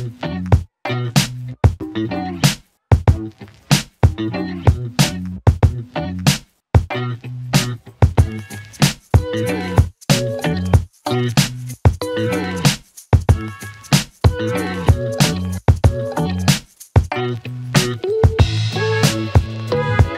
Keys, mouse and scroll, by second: 1.8 ctrl+d, 2.3 click, 2.7 Return, 3.6-5.9 typing, 6.9 click, 7.5 Return, 8.9-11.8 typing, 12.7 click, 12.9 Return, 13.8-17.3 typing, 17.6 Return.